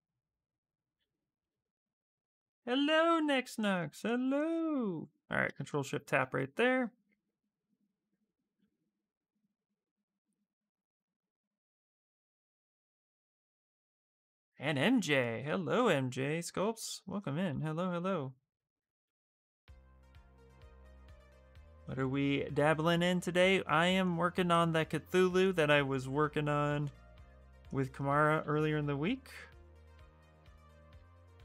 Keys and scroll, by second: 15.5 f.